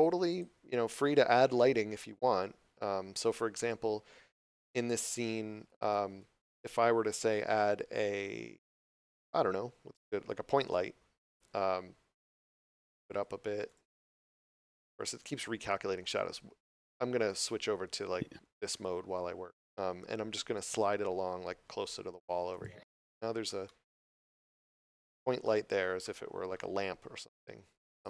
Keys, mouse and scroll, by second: 5.9 shift+s, 6.1 1, 7.3 shift+a, 10.5 click, 13.6 click, 17.1 click, 18.7 middle click, 20.3 g, 22.5 click, 22.9 middle click, 24.6 scroll up 1, 25.5 scroll down 1, 27.9 click.